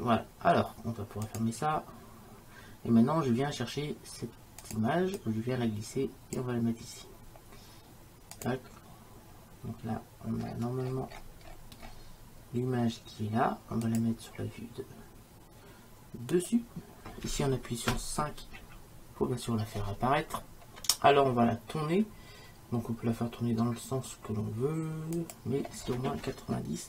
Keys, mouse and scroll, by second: 10.5-13.9 middle drag, 13.9-15.8 drag, 18.6 KP_5, 20.4-24.2 middle drag, 25.2-26.8 drag.